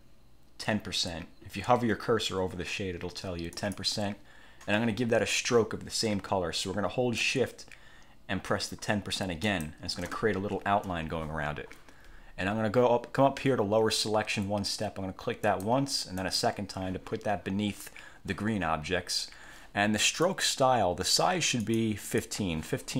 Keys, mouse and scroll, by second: 3.7 click, 9.6 shift+click, 15.6 click, 16.3 click, 20.4 click, 21.8 click.